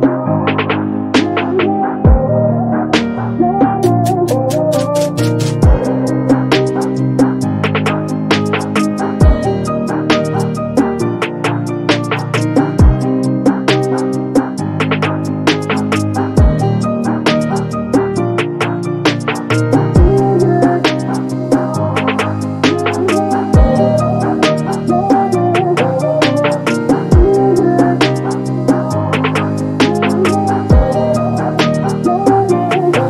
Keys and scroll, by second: 5.8 r, 9.0 space, 9.6 r, 12.5 space, 20.3 p, 23.0 space, 30.5 r.